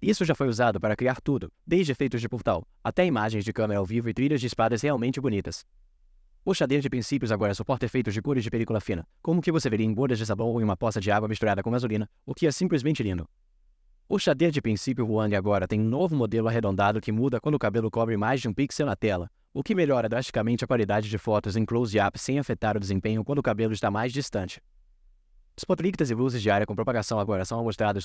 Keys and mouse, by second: 25.8-26.9 drag.